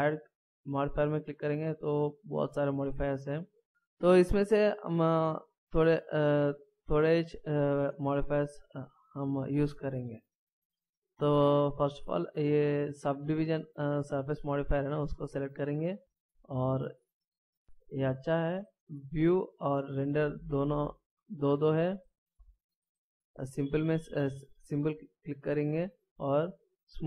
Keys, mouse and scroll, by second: 0.6 click, 6.2 click, 19.3 click, 22.6 click, 26.6 click.